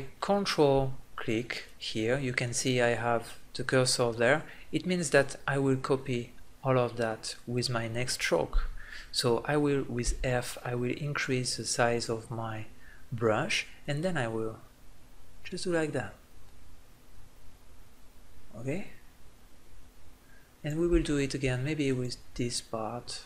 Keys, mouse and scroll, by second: 1.4-3.1 drag, 3.2-9.8 middle drag, 9.8 f, 11.8-13.0 drag, 21.6-23.2 drag.